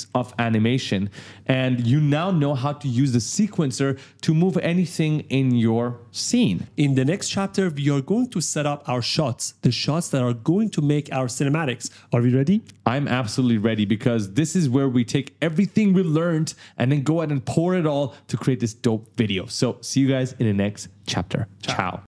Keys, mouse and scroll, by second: 0.1 right click, 0.6 right click, 0.9 right click.